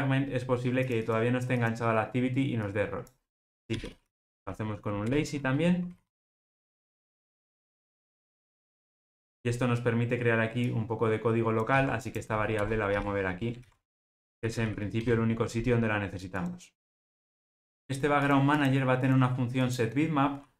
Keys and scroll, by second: 5.1 Return, 11.8 super+x, 13.9 super+v.